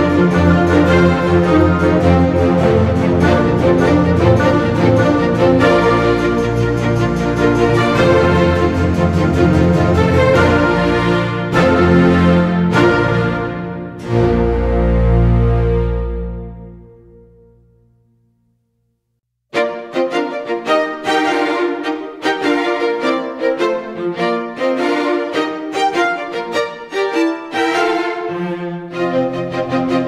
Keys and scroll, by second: 5.4 Delete, 5.7 ctrl+d, 5.9 space, 7.9 space, 8.8 space, 12.4 space, 16.5 space, 18.5 space, 19.3 space, 20.2 space, 22.4 Delete, 22.6 ctrl+d, 25.1 space, 25.9 space, 28.2 space.